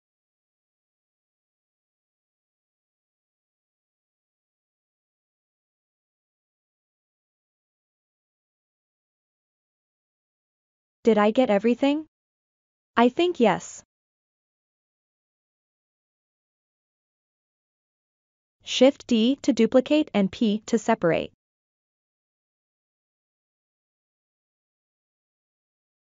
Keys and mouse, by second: 1.1 click, 1.8 click, 2.5 click, 3.1 click, 3.8 click, 4.2-6.0 middle drag, 6.3 middle click, 7.2 l, 7.6-8.6 middle drag, 8.7 middle click, 9.5 l, 10.1-17.2 middle drag, 18.7 shift+d, 20.9 p, 23.0 Tab, 23.5 click.